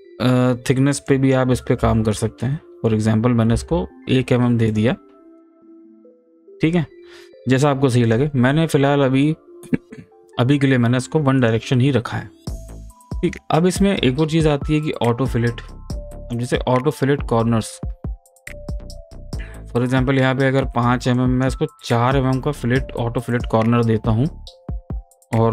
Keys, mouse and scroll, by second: 4.7 click, 8.0 click, 11.4 click, 16.2 click, 21.1 click, 23.3 click.